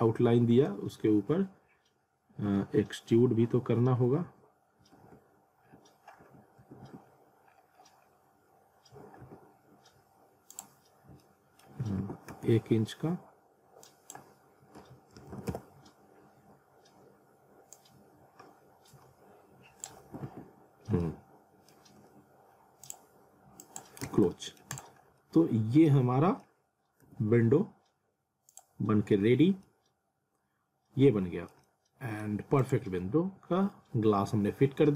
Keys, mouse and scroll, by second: 1.7-6.8 typing, 3.7 scroll down 1, 4.0 scroll up 1, 6.1 scroll down 1, 7.0-7.5 scroll up 1, 8.9 typing, 10.5 click, 11.2 alt+middle click, 11.8 w, 12.3 z, 13.9 click, 15.5 Return, 17.7 click, 20.1 alt+w, 20.8 scroll down 1, 21.1 alt+middle click, 22.9 click, 24.0 z, 24.3 alt+middle click, 24.7 click, 25.0 scroll up 1, 25.2 alt+middle click, 27.1 z, 28.5 click, 29.6-31.6 alt+middle drag, 31.9 alt+middle click, 32.6 click, 33.1 F3, 33.8 F4.